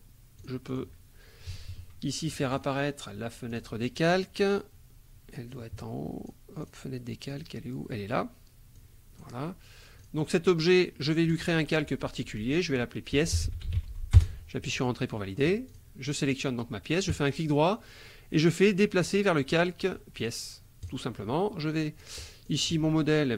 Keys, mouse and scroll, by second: 0.4 click, 2.5 click, 3.5 click, 5.5 click, 6.6 click, 7.3 click, 8.7 click, 10.0 click, 11.3 click, 12.9-14.2 typing, 15.7 click, 17.1 click, 17.3 right click, 19.0 click, 20.2 click, 20.8 click, 22.0 click, 22.4 click, 23.2-23.3 typing.